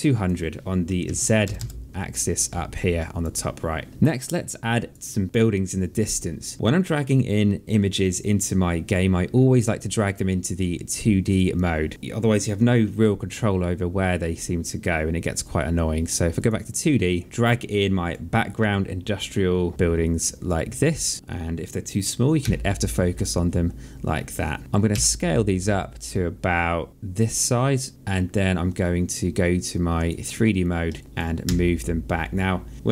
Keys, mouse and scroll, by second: 1.2 KP_0, 1.8 Return, 2.5 alt+click, 4.9 click, 11.0 click, 16.1 click, 17.2 click, 20.2 click, 22.2 f, 24.7 r, 25.5 click, 29.7 click, 30.7 alt+click, 31.2 w, 32.0 click.